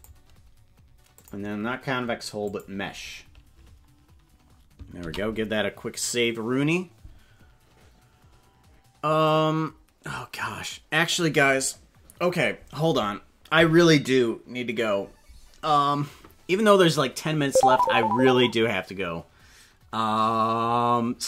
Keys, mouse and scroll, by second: 1.2-2.6 drag, 5.0 ctrl+s.